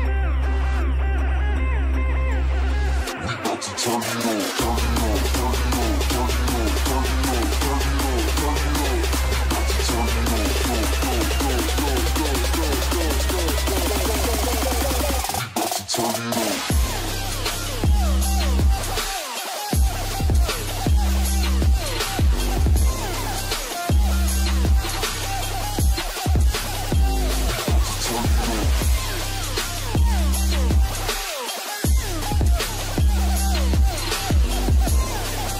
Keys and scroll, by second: 16.6 shift+space, 17.3 ctrl+shift+space, 19.1 ctrl+space, 23.7 ctrl+space, 26.1 ctrl+space, 30.4 ctrl+alt+shift+space.